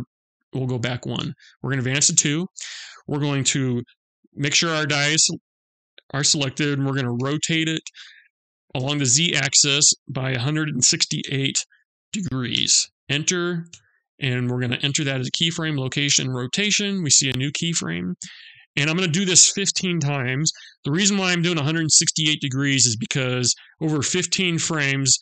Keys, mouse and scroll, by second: 0.8 Right, 4.4 click, 6.8 r, 15.7 i.